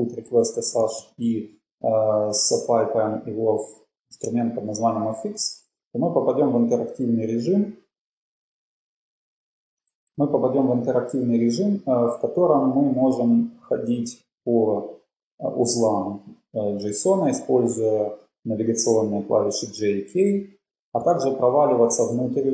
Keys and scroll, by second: 0.0-1.6 typing, 8.7 ctrl+c, 8.7 shift+Return, 10.4 j, 14.3-15.8 typing.